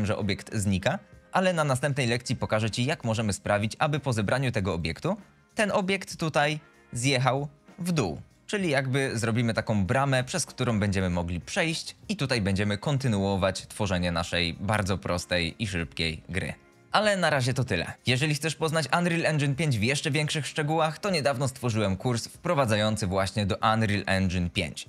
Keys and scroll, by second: 2.6-5.0 typing, 7.9 s, 10.2 w, 10.5 e, 13.9 s, 15.9-16.8 typing.